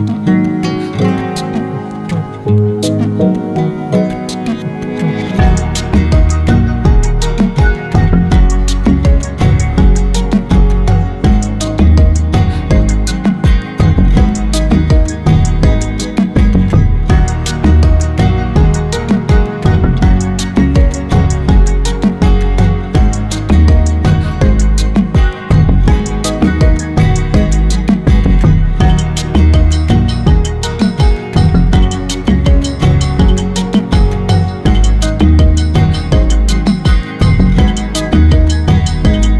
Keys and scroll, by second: 14.3 ctrl+BackSpace, 19.4 ctrl+BackSpace, 24.7 ctrl+BackSpace, 31.4 ctrl+BackSpace.